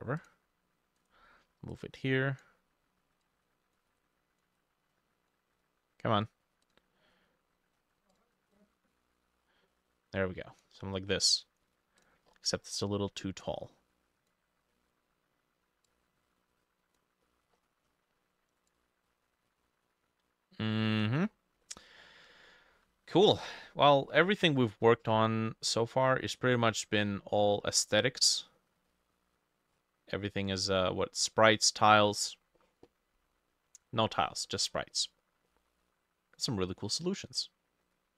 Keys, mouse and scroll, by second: 1.0 right click, 8.6 double click, 10.8-11.3 scroll down 6, 12.3-12.6 scroll down 2, 12.6 middle click, 14.8 middle click, 17.3 middle click, 17.6-21.3 scroll up 10, 21.3-22.4 scroll down 10, 21.7 middle click, 22.7 ctrl+middle click, 22.8 ctrl+s, 24.0 middle click, 25.8 middle click, 26.4 middle click, 26.5-27.8 scroll up 13, 27.8 middle click, 28.3 middle click, 28.9 middle click, 29.8-30.2 scroll up 2, 30.2 middle click, 31.5 middle click, 32.1 middle click, 33.5 middle click, 34.1 middle click, 35.0 middle click, 35.5 middle click.